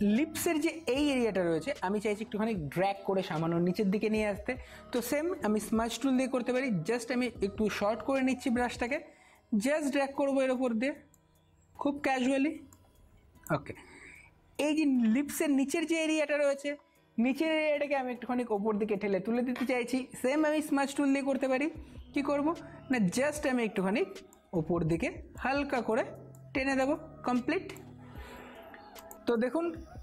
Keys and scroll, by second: 1.6 space, 5.8 [, 5.9 [, 6.2 [.